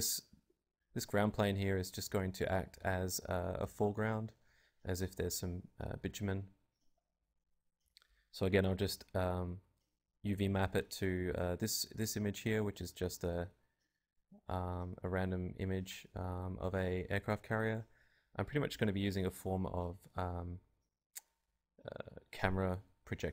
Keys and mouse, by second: 1.9 click, 4.2-5.9 drag, 4.8-5.9 right drag, 5.9 g, 6.6 Tab, 8.9 KP_Divide, 9.6 Tab, 10.1 r, 12.3-15.4 drag, 12.3 s, 12.9 s, 13.4 g, 14.0 s, 16.4 KP_Divide, 17.0 Tab, 17.7 KP_0, 18.0 alt+z, 18.6 alt+z, 18.9 alt+z, 19.6 KP_Divide, 19.8 KP_0, 20.5 Tab, 21.1 Tab, 22.5 KP_Divide, 23.2 z.